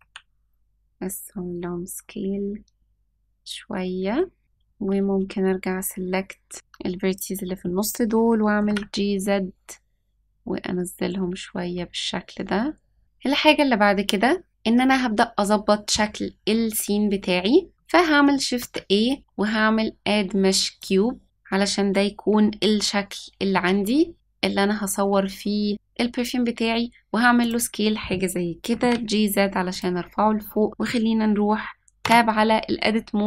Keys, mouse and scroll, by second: 4.4 click, 4.4-5.5 scroll up 2, 4.4 KP_3, 6.5 click, 8.5 g, 13.0 middle click, 13.0 click, 13.0-13.5 scroll down 1, 16.0-16.7 scroll down 3, 16.7-17.3 scroll up 1, 17.3-17.7 scroll up 1, 18.5 shift+a, 23.5 s, 28.6 g, 30.1-30.5 scroll down 2, 32.0 Tab.